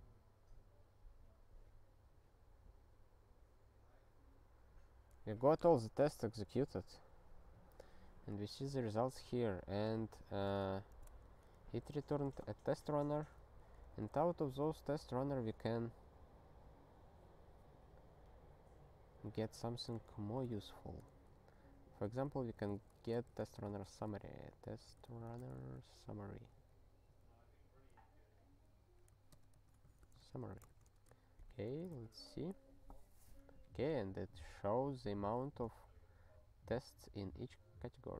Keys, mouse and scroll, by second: 0.0 scroll down 1, 2.1-3.2 scroll down 2, 5.0-5.7 scroll down 1, 6.4-6.7 scroll down 1, 7.0-8.3 scroll down 1, 8.3 click, 8.6 click, 9.1-9.9 scroll down 1, 9.9 click, 10.0 click, 10.7 ctrl+a, 11.3 ctrl+alt+@, 12.1 ctrl+g, 13.7 super+b, 20.1 ctrl+a, 20.6 alt+f, 22.2 ctrl+b, 22.4 ctrl+b, 22.7 ctrl+b, 23.1-25.9 typing, 26.6 alt+/, 27.7 alt+/, 28.5 alt+/, 29.3 ctrl+BackSpace, 29.6-30.9 typing, 30.7 alt+shift+s, 31.4 ctrl+s, 31.7 ctrl+e.